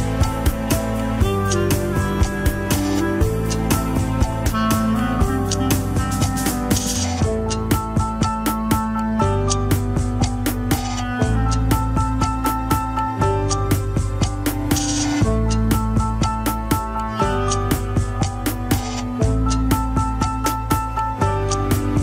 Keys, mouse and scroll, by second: 0.1 click, 0.7 scroll down 3, 1.0 alt+z, 4.2-6.1 drag, 6.1 shift+z, 6.9-8.4 middle drag, 8.4 scroll down 2, 8.8 ctrl+Tab, 9.1 KP_1, 9.5 scroll up 2, 10.0 shift+z, 10.4 click, 10.8 shift+z, 11.1 scroll down 2, 12.4 shift+click, 12.6 alt+z, 12.8 scroll up 2, 13.7 ctrl+Tab, 14.1 a, 14.6 alt+r, 15.0 alt+g, 15.0 scroll down 4, 15.5 ctrl+Tab, 16.3 ctrl+s, 16.3 shift+z, 16.7-17.0 shift+middle drag, 17.0 alt+z, 17.4-17.7 middle drag, 17.7 scroll down 2, 18.5 scroll down 1, 18.6 alt+h, 18.8 KP_3, 19.2 alt+z, 19.7 click, 20.2-20.5 scroll up 1, 20.5 click, 21.7 h, 21.9-22.0 scroll up 3.